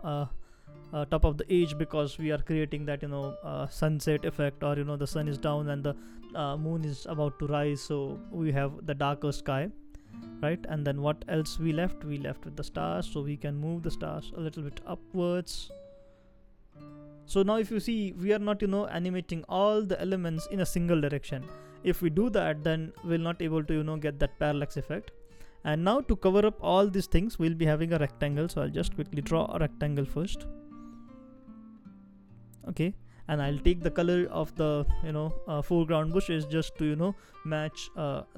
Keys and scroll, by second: 13.0 shift+Up, 13.4 shift+Up, 13.5 shift+Up, 16.4 shift+Down, 16.9 shift+Down, 33.7 i.